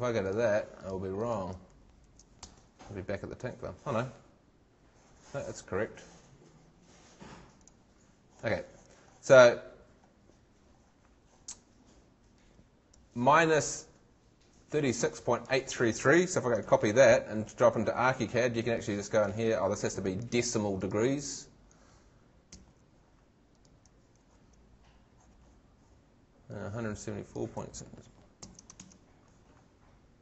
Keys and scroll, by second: 2.0 super+v, 2.4 super+Return, 16.3 super+c, 16.6 super+Tab, 22.5 super+v, 24.2 super+Tab, 28.4 shift+super+c, 28.8 shift+super+Tab.